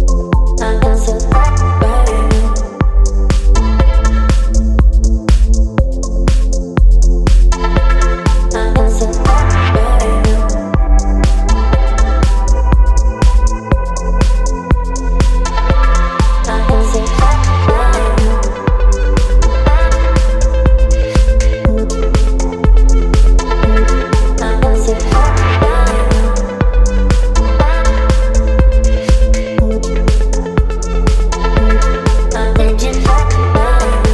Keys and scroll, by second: 25.2 space, 31.4 space.